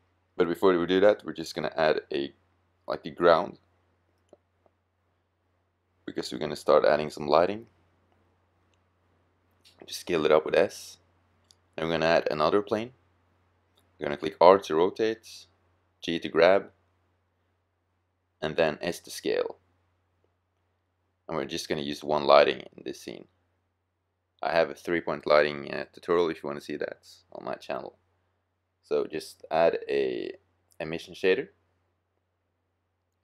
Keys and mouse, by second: 0.3-2.0 middle drag, 2.0-4.0 drag, 4.0-5.4 middle drag, 4.7 s, 5.8 click, 7.0-7.5 middle drag, 8.5 s, 14.4 r, 15.4-16.3 drag, 16.3 g, 18.2 s, 19.4 drag, 22.8 r, 23.6-24.1 drag, 25.1 g.